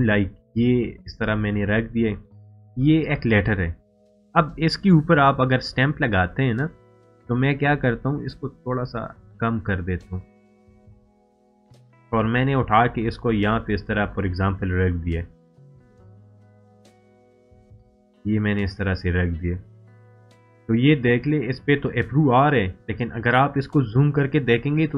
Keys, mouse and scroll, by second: 13.0 right click, 14.1-15.8 drag, 23.6 scroll up 1, 24.7 scroll down 1.